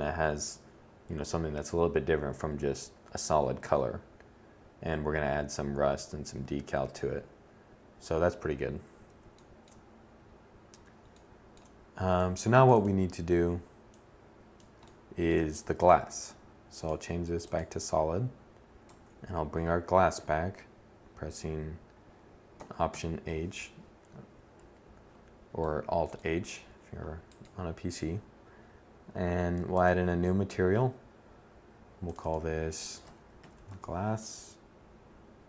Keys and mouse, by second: 4.6-10.9 middle drag, 10.9-12.6 drag, 17.5 Tab, 21.6 alt+h, 23.2 1, 32.2 s.